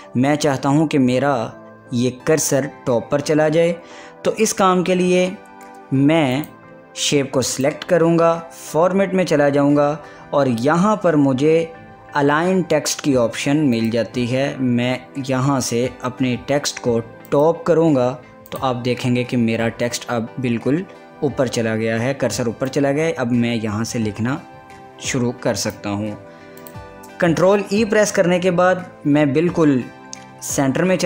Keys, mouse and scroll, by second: 6.4 click, 18.1 click, 22.9-26.7 drag, 28.0 ctrl+e.